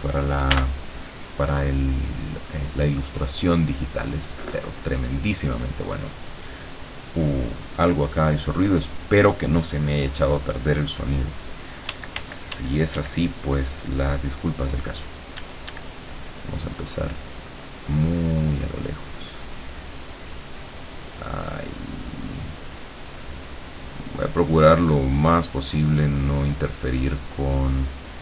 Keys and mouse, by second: 0.6 b, 2.1-4.6 drag, 5.3 click, 11.9 d, 15.4 d, 16.3-19.8 drag, 20.4-28.2 drag.